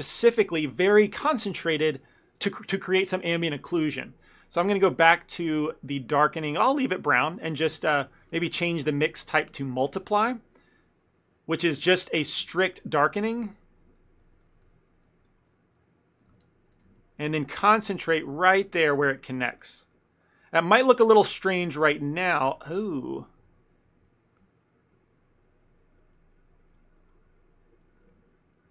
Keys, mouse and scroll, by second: 5.3 click, 10.0 click, 10.0 f, 10.3 ctrl+middle click, 10.9 click, 11.3 click, 11.8 f, 12.5 ctrl+z, 12.8 ctrl+z, 13.0 ctrl+z, 13.4 f, 14.0 click, 14.3 click, 14.7 click, 14.9 click, 15.1 click, 15.3 click, 15.8 click, 15.8 middle click, 16.5 ctrl+z, 16.6 ctrl+z, 16.8 f, 17.1 ctrl+middle click, 17.4 click, 17.6 click, 18.4 middle click, 18.8 click, 19.1 click, 20.5 middle click, 20.7 middle click, 21.0 click, 21.2 click, 22.6 ctrl+middle click, 22.7 ctrl+middle click, 22.8 middle click, 23.0 middle click, 23.2 ctrl+middle click, 23.5 middle click, 23.9 shift+middle click, 24.0 shift+middle click, 24.1 ctrl+middle click, 25.2 middle click, 26.1 middle click, 26.1 shift+middle click, 26.6 click, 28.5 click, 28.6 ctrl+middle click.